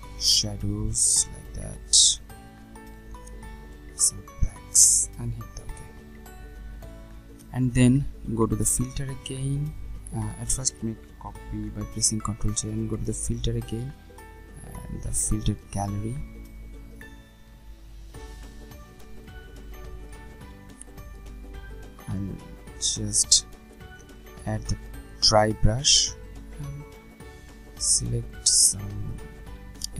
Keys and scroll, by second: 11.8 ctrl+j.